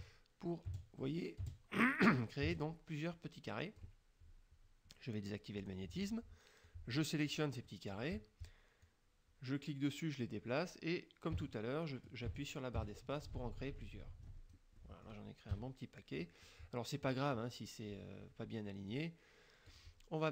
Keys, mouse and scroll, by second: 0.0 space, 0.7 space, 1.5 space, 2.5 space, 5.7 click, 6.7-7.6 drag, 7.7 click, 8.9-14.7 drag, 11.4 space, 12.4 space, 14.9 click, 14.9 middle click, 15.5 KP_Subtract, 16.3 click, 19.0 click.